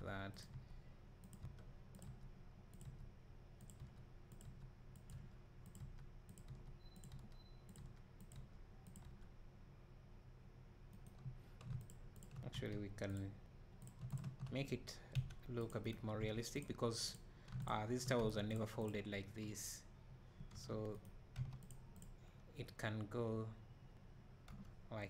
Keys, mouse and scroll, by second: 5.0-11.9 drag, 13.2 x, 13.9 click, 15.6 c, 15.9 right click, 16.6 x, 17.1 click, 17.7 shift+click, 18.6 x, 18.9 click, 20.5 g, 21.0 right click, 21.7 x, 22.0 click, 24.5 g.